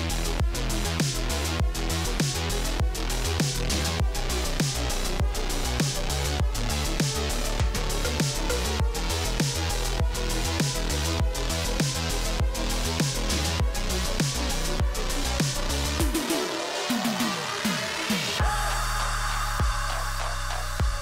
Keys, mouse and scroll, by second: 0.5 alt+click, 1.1 ctrl+v, 1.6 click, 1.9 space, 4.2 space, 4.4 space, 5.4 space, 8.9 click, 9.8 typing, 10.4 Tab, 11.0-12.2 typing, 13.8-14.5 typing, 15.8-16.8 typing, 18.5-21.0 typing.